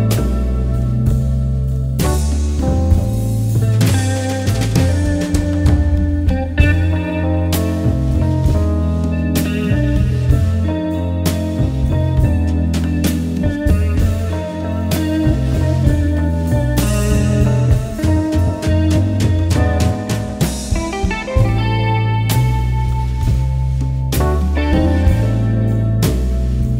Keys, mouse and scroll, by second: 8.0 alt+scroll down 1, 8.7-9.2 alt+scroll up 1, 10.4-13.9 drag, 17.5-20.9 drag, 21.5-21.8 alt+scroll down 1, 23.1-24.1 alt+scroll up 1, 24.3-26.7 drag.